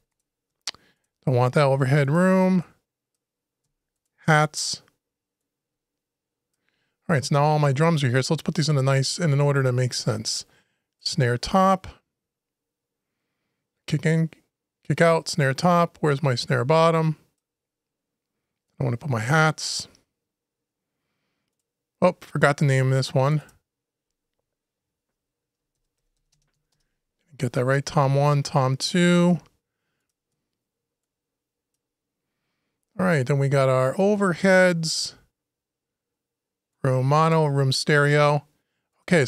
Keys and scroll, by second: 26.5 shift+Return.